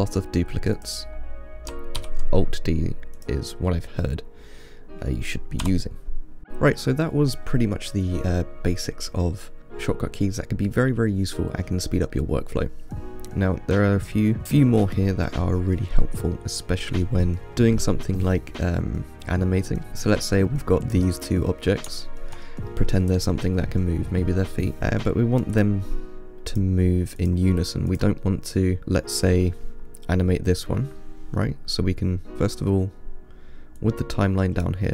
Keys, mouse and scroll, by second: 0.4-1.0 scroll down 2, 1.0 click, 2.2 alt+d, 3.9-5.8 middle drag, 5.8 Delete, 9.6-12.6 middle drag, 16.0-17.5 middle drag, 17.5 click, 19.9 shift+d, 21.6-25.8 middle drag, 25.8 click, 26.8 click, 27.5 click, 28.2 click, 28.5-30.4 middle drag, 34.0-34.9 drag.